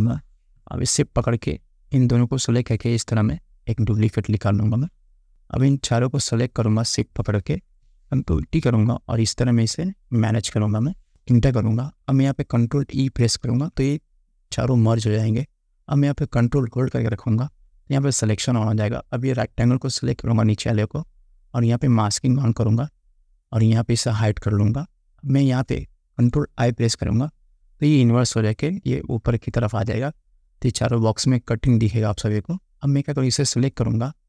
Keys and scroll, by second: 8.3 ctrl+t, 11.2 Return, 13.5 ctrl+e, 27.0 ctrl+i.